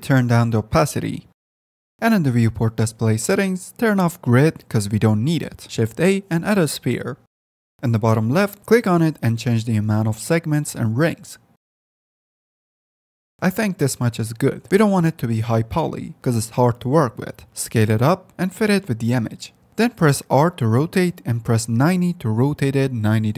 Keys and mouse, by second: 1.9 middle click, 4.7-5.9 middle drag, 5.7 Tab, 5.7 x, 5.9 shift+a, 6.1-7.1 middle drag, 9.8-11.0 drag, 11.3-14.6 drag, 16.7 click, 17.0 F10, 17.4 Tab, 17.6 s, 20.6 r.